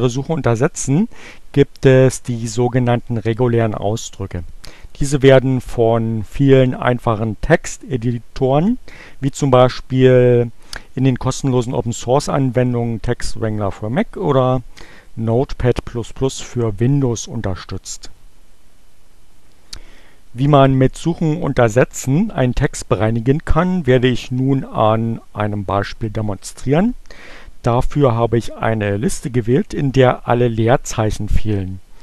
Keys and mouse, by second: 3.1-5.2 drag.